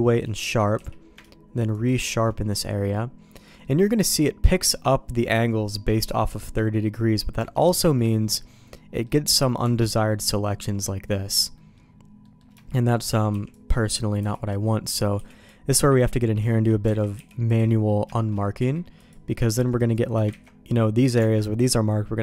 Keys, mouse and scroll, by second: 0.7 q, 2.7 middle click, 6.7 middle click, 7.3 Tab, 7.7 middle click, 8.0 middle click, 8.7 middle click, 11.5 middle click, 12.2 middle click, 12.5 shift+middle click, 12.9 middle click, 13.3 b, 14.1 b, 14.6 middle click, 15.1 b, 15.7 q, 16.4 shift+middle click, 17.1 alt+a, 17.1 b, 17.6 middle click, 18.5 q, 19.2 middle click, 19.6 shift+middle click, 20.4 ctrl+z, 21.1 Tab.